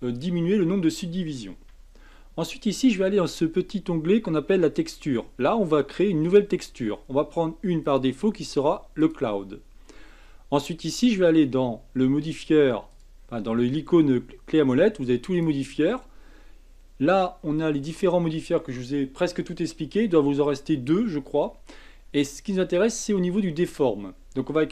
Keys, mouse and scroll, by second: 1.7 Tab, 4.9 click, 6.2 click, 7.8-12.1 drag, 12.9 click, 15.3-18.3 drag.